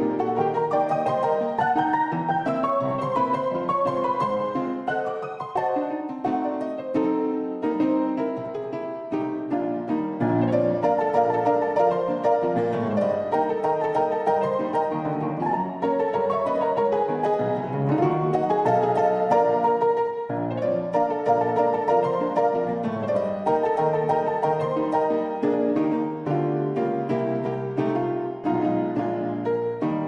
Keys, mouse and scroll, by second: 1.0 `, 2.0 z, 2.7 click, 3.7 shift+click, 6.7 shift+click, 7.6 x, 9.3 click, 9.9 z, 10.8 shift+click, 11.1 click, 12.0 shift+click, 13.4 shift+click, 14.3 a, 15.1 f, 16.4-19.2 drag, 19.6 ctrl+z, 20.3 shift+click, 20.8 click, 21.6 shift+click, 22.4 f, 22.8 f, 23.7 click, 24.7 click, 26.1 f, 26.4 f, 27.3 shift+click, 27.6-28.7 drag.